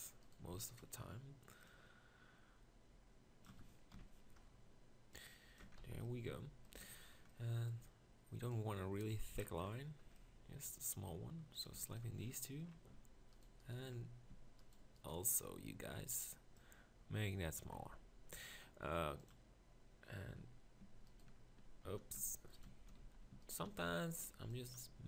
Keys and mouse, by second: 0.4 b, 3.9 ctrl+KP_Decimal, 5.6 Tab, 5.8 z, 6.8 Tab, 12.2 middle click, 17.8 Tab, 20.4 Tab, 20.9 Tab, 21.3 Tab, 22.2 Tab, 23.0 z, 24.3 b.